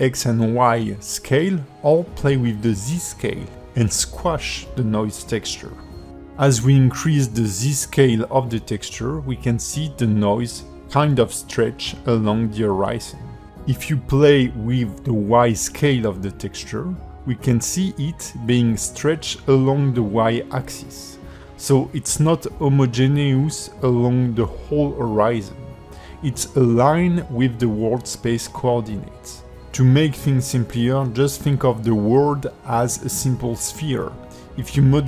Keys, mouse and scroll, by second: 4.5 click, 6.6 KP_1, 9.2 middle click, 14.5 click, 17.8 middle click, 24.6 click, 25.2 middle click, 28.0 middle click, 30.6-31.0 scroll down 3, 31.3 alt+middle click, 34.2 click.